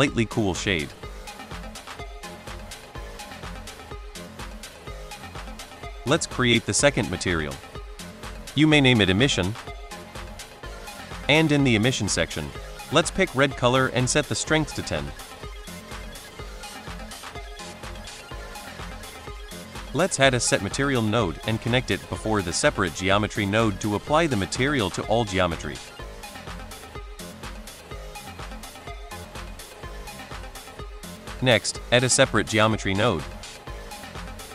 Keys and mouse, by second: 5.7 click, 6.5 click, 7.2-10.5 shift+drag, 8.6 m, 12.4 click, 13.1 click, 14.9-16.0 drag, 18.1 middle click, 19.6 middle drag, 20.1 shift+a, 22.1 click, 22.5-23.1 drag, 24.4-25.3 drag, 26.1 middle drag, 27.4 middle drag, 28.3-28.6 middle drag, 29.0-29.3 middle drag, 30.1 middle drag, 31.6 shift+a.